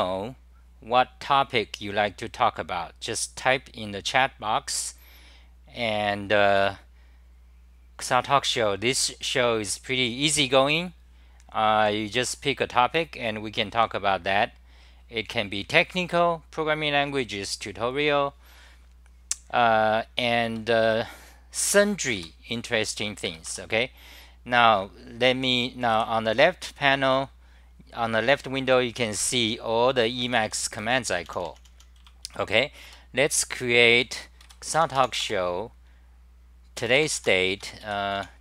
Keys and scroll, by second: 22.2 k, 23.2 Return, 26.0 w, 30.2-32.3 typing, 32.8 Return, 34.1 u, 37.6 Home, 37.8 ., 38.1 e.